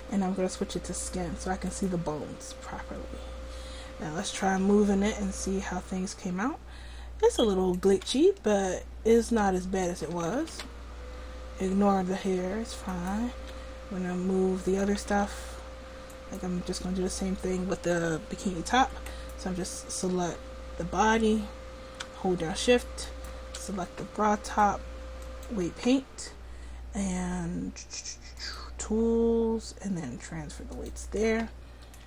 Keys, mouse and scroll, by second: 1.9 right click, 4.6 r, 7.8 click, 7.9 r, 10.2 a, 10.3 a, 10.5 alt+r, 12.9-14.0 drag, 13.4 r, 14.9 a, 15.0 a, 15.3 alt+r, 19.1-24.0 drag, 25.5-32.0 drag.